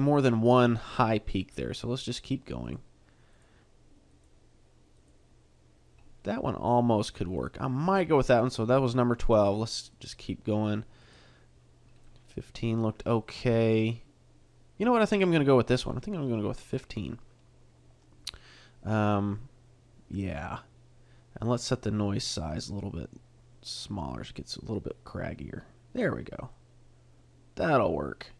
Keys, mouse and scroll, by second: 0.0 middle click, 1.7 click, 2.6 click, 3.3 click, 4.1 click, 5.0 click, 6.2 middle click, 9.2 click, 9.9 click, 11.0 click, 12.0 middle click, 13.6 middle click, 22.2 click, 26.5 middle click.